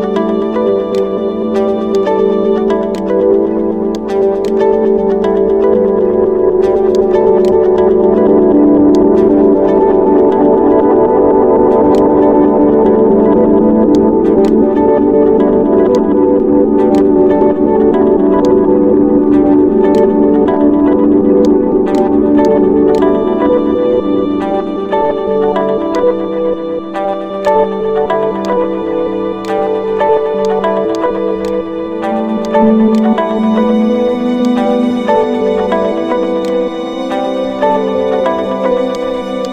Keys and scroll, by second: 5.4 t, 14.2-15.1 typing, 19.9-20.6 typing, 23.5 d, 25.0 p, 30.7 typing, 31.8 typing.